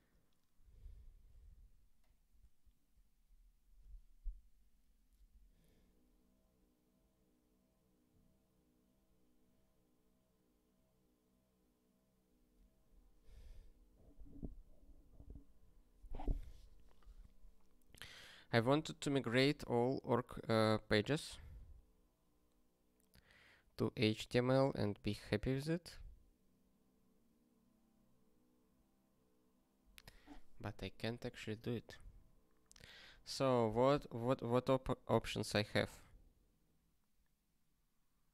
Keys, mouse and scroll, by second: 2.3 ctrl+s.